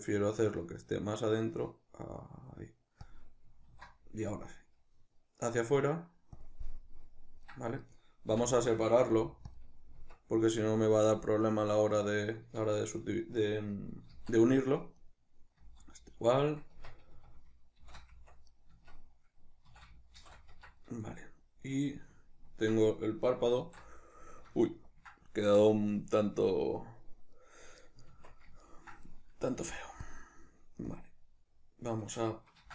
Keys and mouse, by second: 3.1 click, 3.8 alt+e, 6.5 click, 6.7-7.8 middle drag, 7.8 right click, 8.4 l, 10.0 Tab, 10.5 right click, 11.6-15.0 middle drag, 14.2 z, 15.0 right click, 15.6 z, 16.8 Tab, 17.2 a, 17.8 shift+n, 18.2 Tab, 18.5 right click, 18.8 Tab, 19.7 a, 20.2 shift+n, 20.6 Tab, 21.2-27.4 middle drag, 23.6 alt+q, 27.4 right click, 28.1 Tab, 28.6-30.1 ctrl+middle drag, 29.6 f, 30.1 click, 30.9-32.7 drag, 32.6 ctrl+z.